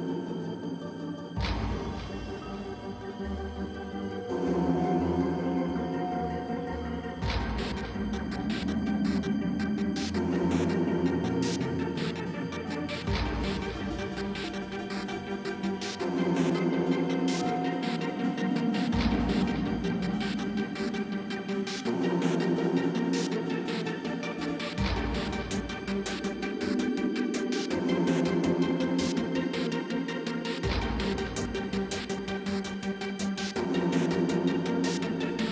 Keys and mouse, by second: 0.1 Tab, 1.4 KP_7, 1.9 z, 3.0-3.9 middle drag, 3.1 Tab, 4.5 z, 4.7 middle click, 6.1 ctrl+z, 6.9 ctrl+z, 7.7 g, 8.3 KP_7, 9.0 g, 10.8 z, 11.9 ctrl+b, 15.1 Tab, 15.5-17.6 typing, 16.1 Tab, 19.0 z, 19.2 Tab, 19.6 Tab, 19.8-21.2 middle drag, 20.8 ctrl+b, 21.8 Tab, 22.3 Tab, 22.8 Tab, 23.0 Tab, 23.7 ctrl+b, 25.4 Tab, 25.8 Tab, 26.0 ctrl+z, 26.1 ctrl+z, 26.4 ctrl+b, 27.0 Tab, 27.2 Tab, 27.7 Tab, 27.7 Tab, 27.8 a, 28.0 a, 28.0 w, 28.2 Tab, 28.5-29.0 middle drag, 29.0 Tab, 29.1-29.8 middle drag, 29.9 ctrl+r, 30.6 KP_Divide, 30.7 KP_7, 31.8 k, 34.5 Tab, 34.6 Tab, 34.8-35.2 middle drag, 35.3 g.